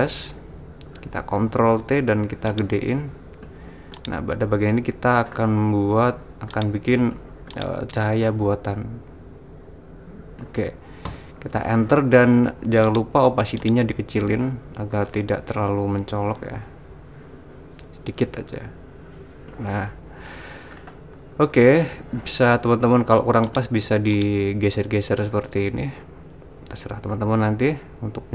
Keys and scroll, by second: 1.4 super+t, 11.2 Return.